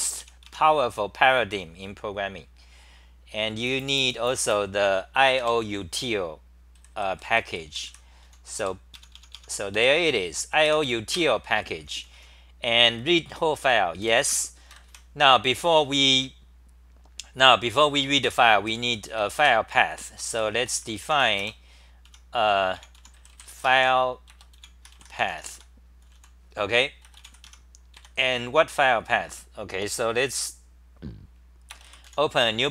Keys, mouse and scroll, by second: 0.0-0.4 typing, 6.7 d, 8.2-11.6 typing, 11.6 ctrl+g, 13.0 r, 13.6 r, 14.0 g, 14.7 ctrl+g, 18.2 ctrl+g, 18.2-21.5 typing, 20.2 Return, 20.4 Return, 22.1 Home, 22.7-24.3 typing, 25.5 Home, 26.1 t, 27.2 h, 27.4 Home, 27.9 4, 30.3 Delete.